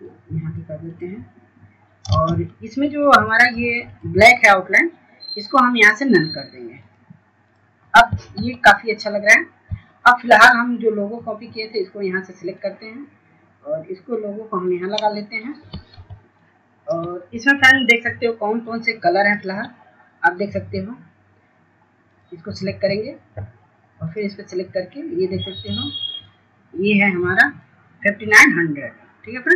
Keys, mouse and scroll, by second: 1.0 scroll up 1, 1.6 click, 4.2 scroll down 1, 5.1 ctrl+space, 5.3 scroll up 1, 5.8 click, 6.5 shift+click, 7.1 scroll down 1, 8.4 click, 10.9 F2, 11.2 click, 13.1-13.6 scroll down 1, 13.7-14.1 scroll up 1, 14.1-16.9 drag, 17.5 scroll down 1, 18.4 F2, 18.8 click.